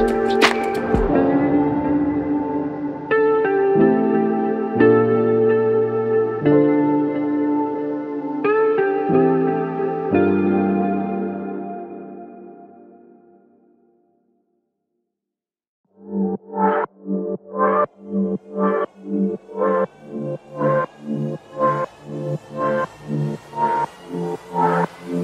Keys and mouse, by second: 0.2 alt+click, 2.6 alt+click, 3.6 f, 4.8 alt+click, 7.7 double click, 10.9 alt+click, 12.0 double click, 12.9 alt+click, 14.1 double click, 15.9 alt+click, 16.9 double click, 18.9 alt+click, 19.7 shift+click, 19.9 shift+double click, 20.1 shift+click, 21.0 shift+l, 21.5 alt+shift+click, 22.1 alt+shift+click, 22.3 shift+double click, 24.2 alt+m.